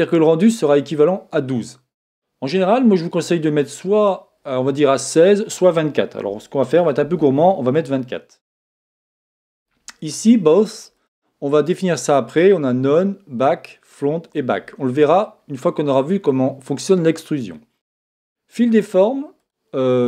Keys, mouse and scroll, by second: 4.9 click, 10.9 click, 18.2-20.0 drag.